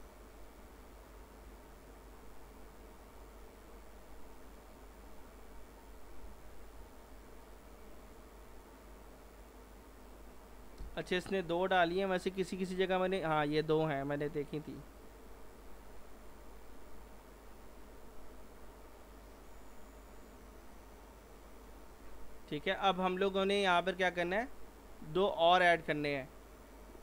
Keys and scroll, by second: 1.2 alt+r, 6.3 alt+r.